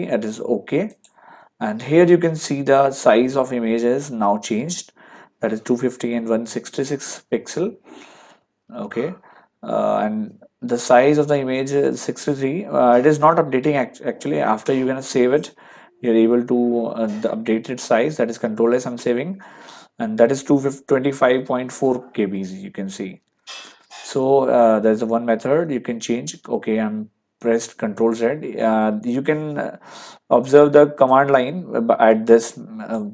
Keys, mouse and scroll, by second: 0.9 click, 4.7 ctrl+1, 8.7 ctrl+1, 11.4 ctrl+1, 15.6 ctrl+1, 18.5 ctrl+s, 23.0 ctrl+1, 23.1 ctrl+1, 25.0 ctrl+1, 26.4 ctrl+z, 31.1 click.